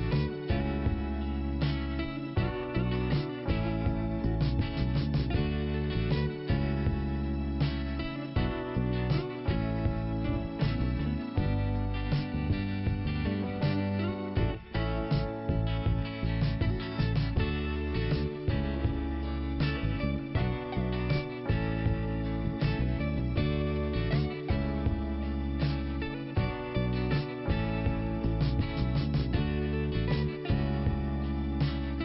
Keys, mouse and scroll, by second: 0.6 click, 0.8 click, 2.7 right click, 4.0 click, 4.8 click, 8.7 click, 10.7 middle click, 11.8 click, 14.3 click, 14.4 click, 15.9 click, 15.9 click, 17.0 click, 20.8 middle click, 22.0 click, 24.7 scroll up 2, 25.3 click, 26.8 click.